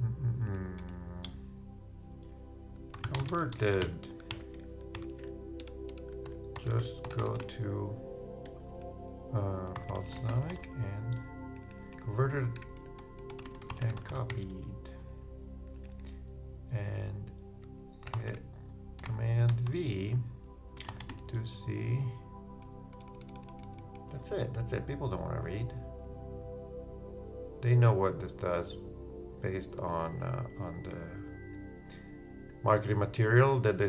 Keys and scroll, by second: 0.5 super+a, 0.8 super+BackSpace, 2.9-4.8 typing, 6.1 shift+Return, 6.2 shift+j, 6.5 shift+u, 8.4 shift+space, 9.7 shift+b, 13.9 shift+space, 14.0 shift+c, 18.3-20.7 typing.